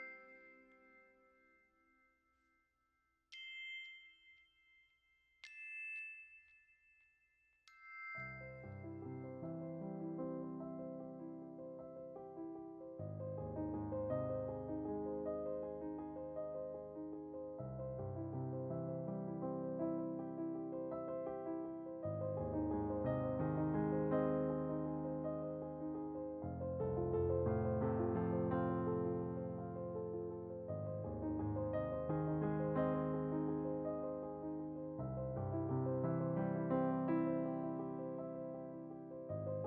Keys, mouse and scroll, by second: 0.6 middle click, 0.9-6.5 drag, 6.5 middle click, 7.1-12.5 drag, 12.5-14.2 middle drag, 14.2-16.8 scroll up 1, 16.8 g, 19.1 alt+right click, 19.2 g, 21.9-25.6 drag, 26.0 shift+d, 27.1 click, 27.9 scroll down 5, 28.4 right click, 28.8 g, 32.5 shift+middle click, 32.7 shift+d, 33.5-34.3 right drag, 34.3 Delete, 35.6 r, 35.6 g, 37.2 shift+s.